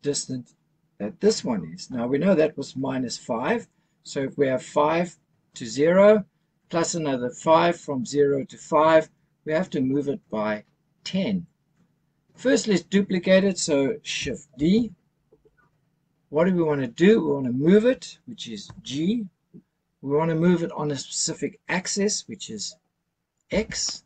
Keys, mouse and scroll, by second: 14.7 shift+d, 18.6 g, 23.5 x.